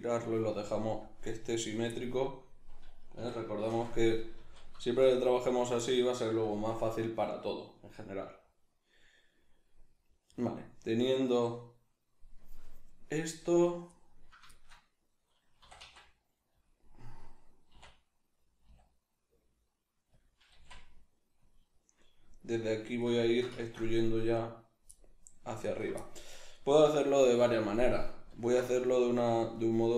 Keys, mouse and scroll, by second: 1.9-5.4 middle drag, 3.1 a, 3.7 shift+n, 4.3 z, 5.4 alt+right click, 5.8-15.6 middle drag, 15.6 e, 16.6-17.8 drag, 17.8 e, 20.2 click, 20.4 g, 21.5 click, 21.7-24.4 middle drag, 24.4 right click, 24.9 middle click, 25.7 ctrl+right click, 26.0-29.5 middle drag, 28.4 alt+q, 29.5 right click.